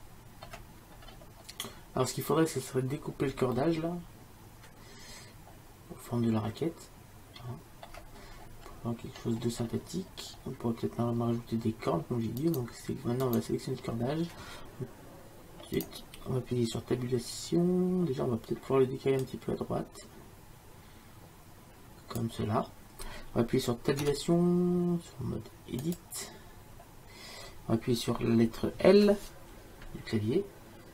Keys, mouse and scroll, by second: 5.0 middle click, 5.2 middle click, 5.4 middle click, 8.1-13.1 middle drag, 13.1-15.4 drag, 19.3-21.1 drag, 24.1 Tab.